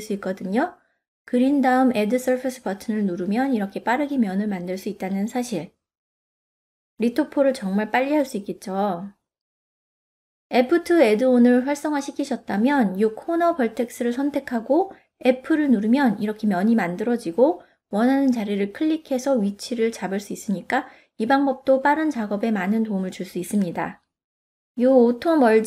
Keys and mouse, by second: 1.7-5.0 middle drag, 5.4-6.8 drag, 13.9 f, 23.3 click, 24.1 f, 25.0 click.